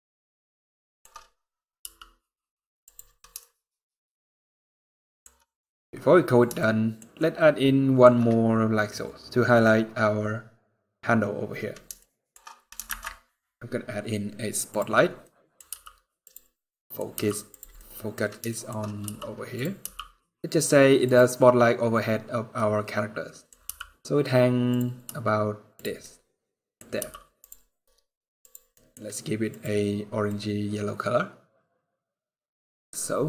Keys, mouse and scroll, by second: 1.6 r, 3.1 shift+middle click, 5.2 scroll up 2, 6.3 shift+middle click, 7.0 shift+middle click, 8.1 scroll down 2, 8.5 scroll up 2, 10.5-11.2 scroll down 1, 11.2-11.5 scroll down 1, 11.7 shift+middle click, 12.6 shift+a, 14.9 middle click, 15.4 g, 16.5 middle click, 16.9 g, 17.5 middle click, 18.2 shift+middle click, 18.8 r, 19.6 g, 22.3 middle click, 23.4 g, 24.8 r, 25.8 middle click, 26.7 g, 28.2 middle click, 28.2 click, 28.4 middle click, 28.4 g, 29.2 click.